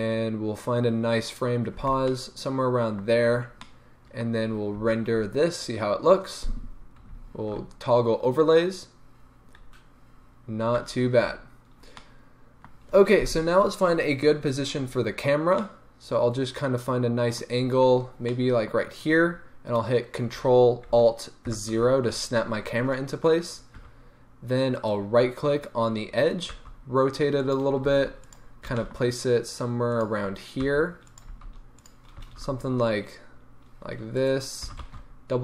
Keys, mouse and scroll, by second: 1.8 space, 2.1 middle click, 3.2-3.6 scroll up 1, 3.7-24.8 middle drag, 4.3-4.8 scroll down 2, 4.8 z, 18.0 scroll down 2, 21.5 ctrl+alt+KP_0, 23.8 1, 24.8-26.5 right drag, 26.5 r, 27.5 click, 27.9 g, 28.3 click, 28.6 g, 30.0 click, 30.3-30.6 scroll, 30.6 click, 30.6 r, 31.3 g, 32.2 r.